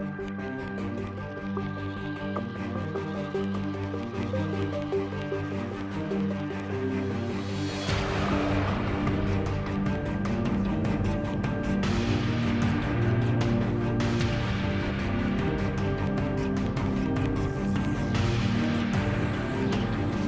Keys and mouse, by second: 1.0 z, 1.5 z, 1.9 g, 3.5-5.0 drag, 3.9 g, 5.3 Tab, 7.0 s, 8.9 ctrl+z, 9.5 KP_7, 10.7 ctrl+r, 12.2 middle click, 13.1 s, 14.1 z, 14.6 ctrl+z, 15.5 z, 15.6 s, 16.3 z, 16.3 Tab, 16.6 Tab, 18.3-20.2 typing, 18.5 Tab, 18.8 Tab.